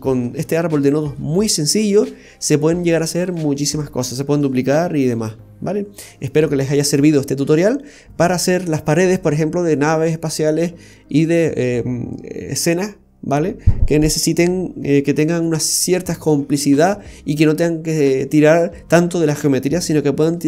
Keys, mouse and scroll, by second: 0.8 middle click.